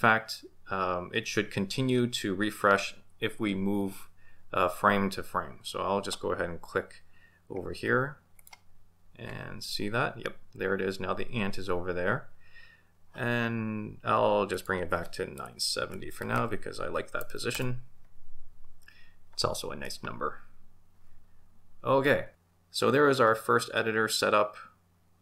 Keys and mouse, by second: 8.4 click, 14.6-17.5 drag.